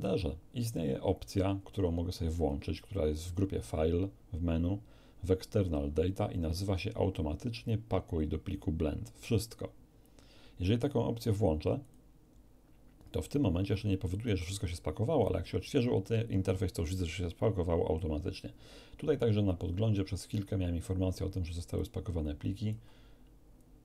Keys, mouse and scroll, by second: 2.3 click, 11.8 click, 21.7 click, 23.4 scroll down 1.